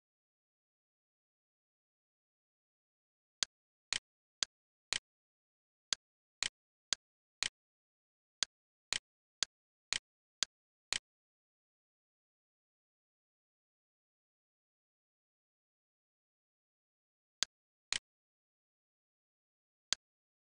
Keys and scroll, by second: 2.1 r, 7.5 d, 12.1-15.1 typing, 15.9 Return.